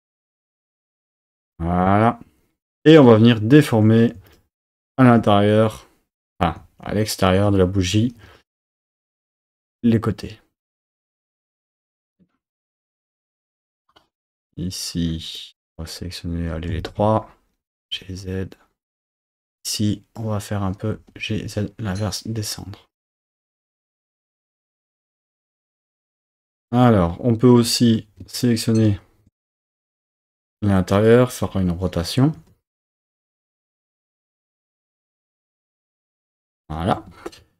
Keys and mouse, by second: 0.4 click, 3.0 3, 4.3 shift+click, 4.8 shift+click, 8.2 g, 8.5 z, 9.6 click, 11.1 click, 11.7 g, 11.8 z, 13.4 click, 15.5 click, 16.8 shift+click, 17.7 g, 17.9 z, 19.1 click, 19.8 click, 20.9 g, 21.3 z, 22.9 click, 26.1 4, 26.6-28.2 drag, 31.5 r, 32.3 z, 32.9 x, 35.7 click, 36.0 Tab, 37.0 Tab, 37.4 2.